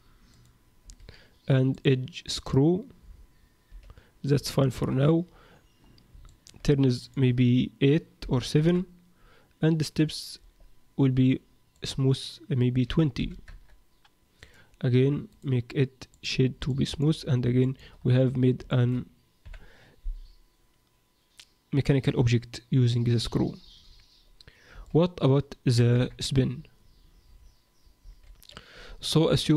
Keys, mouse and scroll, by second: 0.8 a, 1.7 click, 3.3-3.9 scroll down 2, 3.7 z, 4.5 shift+middle click, 5.2-5.8 scroll down 1, 5.8-6.3 scroll down 6, 6.3 shift+middle click, 7.0 click, 11.3-11.7 scroll up 7, 11.7 click, 14.4 click, 14.9 Tab, 15.3 right click, 16.7 middle click, 17.2-17.6 scroll down 5, 17.6 shift+middle click, 17.9-18.5 scroll up 5, 18.7 shift+middle click, 19.4 KP_1, 25.9 KP_7, 28.0 shift+a.